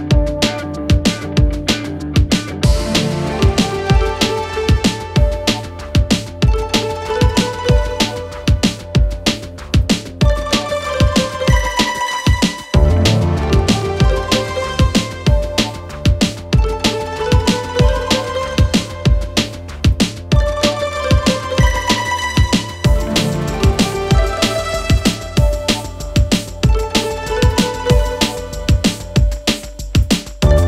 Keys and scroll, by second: 1.4 f, 1.8 Escape, 1.9 ctrl+z, 3.8 f, 7.8 4, 9.5 3, 10.8 4, 12.8 3, 21.7 ctrl+z, 24.0 ctrl+z.